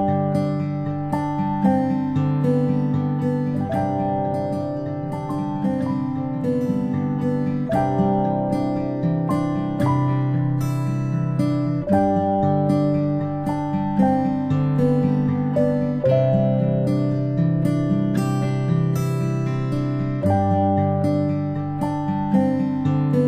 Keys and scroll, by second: 3.4 ctrl+g, 9.0-9.3 space, 10.1 p, 10.7 ctrl+space, 11.4 typing, 11.8 ctrl+f, 15.6-16.4 typing, 19.0 ctrl+space, 19.7 alt+space, 20.5 ctrl+space, 21.1 ctrl+f.